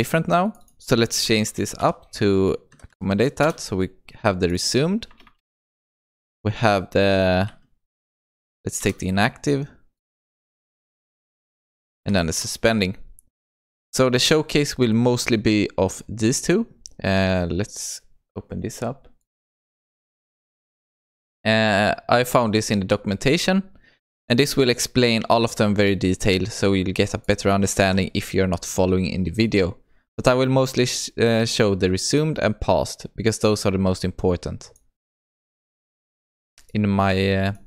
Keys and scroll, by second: 3.5 Return, 8.8 Return, 12.4 Return.